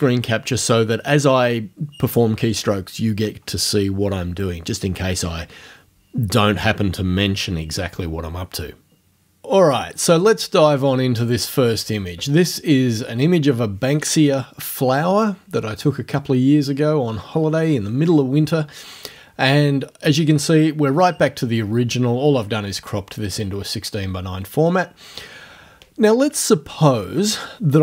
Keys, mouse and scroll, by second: 11.2 click.